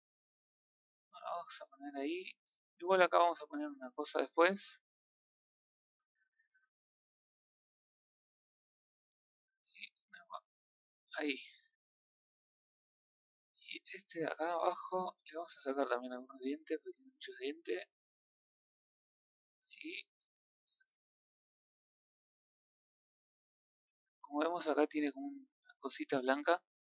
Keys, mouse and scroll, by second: 0.2-4.5 middle drag, 4.5-5.2 scroll up 1, 5.2 scroll down 2, 5.4-8.9 middle drag, 8.9-10.9 drag, 11.5-15.3 middle drag, 15.3 click, 17.9-19.1 drag, 19.1-21.2 middle drag, 21.2 scroll up 3, 21.7-22.8 shift+middle drag, 22.8 scroll down 1, 23.1-23.7 middle drag, 23.7 a, 24.1-24.6 scroll up 3, 26.1-26.4 scroll down 1, 26.4-26.9 middle drag.